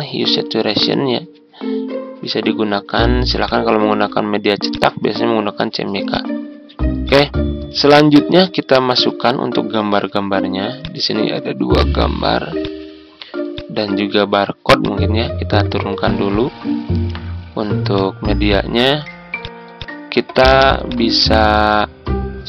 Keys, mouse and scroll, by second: 7.8 Tab, 9.1 Tab, 10.7 click, 12.5 ctrl+click, 13.5 ctrl+click, 14.8-17.1 drag, 18.6 ctrl+scroll down 1, 19.3-22.4 drag.